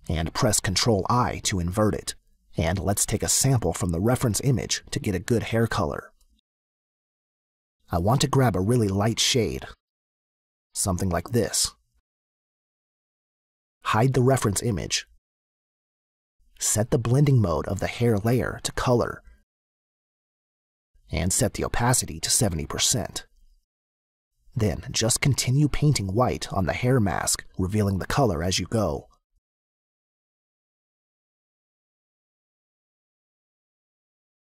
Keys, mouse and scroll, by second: 0.7 ctrl+i, 5.5 click, 6.7 click, 8.2 click, 9.7 click, 13.0 click, 14.6 click, 16.3 click, 18.0 click, 20.0 click, 21.5 click, 23.8 click, 25.3 click, 25.3 space, 28.5 click, 31.6 click, 34.3 click, 34.4 space, 34.4 click.